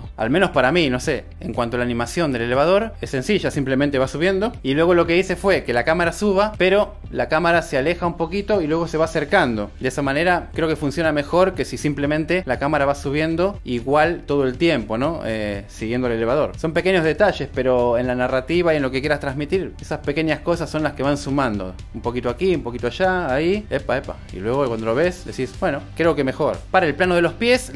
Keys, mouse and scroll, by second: 2.9 space, 5.5 g, 5.6 y, 8.6 i, 8.6 space, 9.7-13.2 drag, 14.8 i, 18.8 shift+d, 18.8 z, 19.7 space, 22.9 super+s, 23.0 click, 23.6-26.4 middle drag, 24.0 space, 25.8-27.7 typing, 26.9 click, 27.6 click.